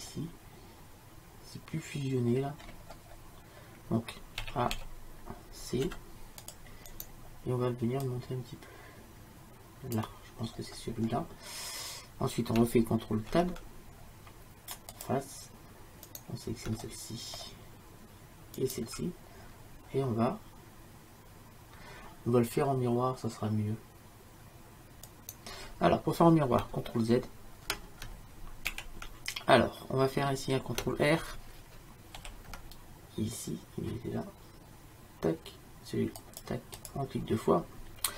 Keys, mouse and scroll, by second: 0.3-2.7 middle drag, 4.5 a, 4.8 a, 5.9 c, 10.6 middle click, 13.4 ctrl+Tab, 17.1-19.4 middle drag, 19.4-25.2 drag, 25.2-28.8 right drag, 28.8 ctrl+z, 32.2 ctrl+r.